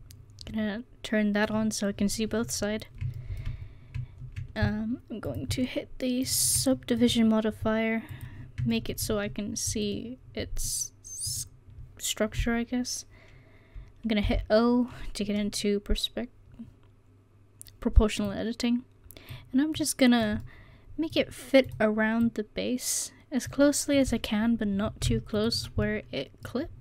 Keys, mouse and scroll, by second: 1.6-2.9 middle drag, 3.2 middle click, 6.3 click, 7.2-8.1 middle drag, 8.1-10.0 drag, 14.3 o, 18.3-20.5 drag, 20.5 middle click, 20.9 middle click, 22.3-23.5 drag, 25.1 ctrl+r.